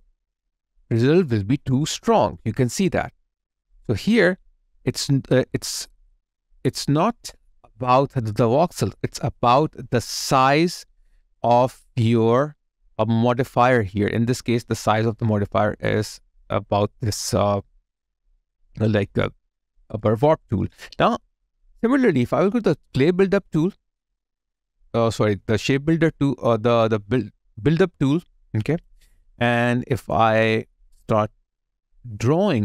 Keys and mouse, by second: 0.1 space, 4.1 alt+click, 6.2 alt+click, 14.1 alt+right click, 24.1 ctrl+right click, 30.1 ctrl+click.